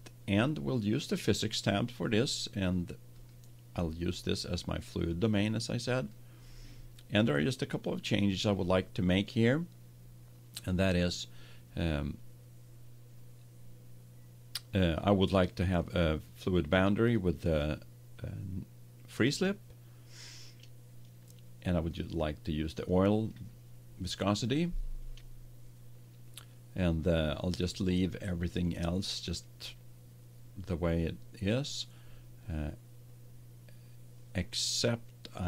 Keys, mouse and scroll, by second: 1.8-6.9 drag, 8.0-9.9 drag, 15.7-19.0 drag, 21.8-23.7 drag, 35.4 click.